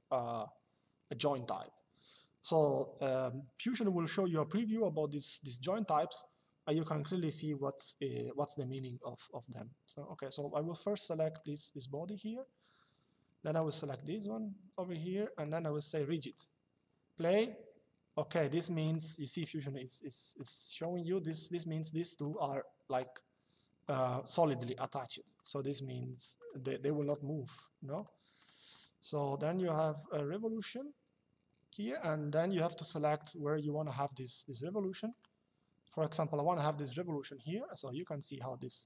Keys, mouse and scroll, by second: 1.2 click, 11.1 click, 13.3 click, 15.1 click, 18.6 click, 20.1 click, 21.9 click, 23.6 click, 34.8 click.